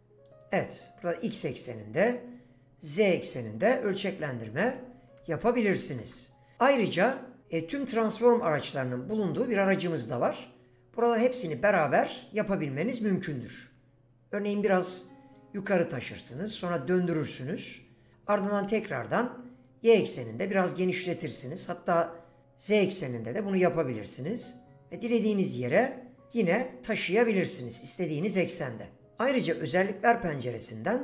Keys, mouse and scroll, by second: 2.9 click, 4.3 ctrl+z, 4.6 ctrl+z, 5.2 ctrl+z, 5.8 ctrl+z, 11.3 click.